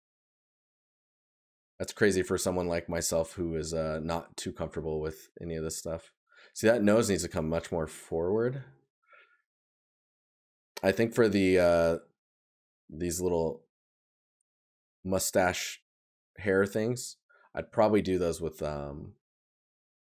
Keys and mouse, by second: 0.3 right click, 7.4 right click.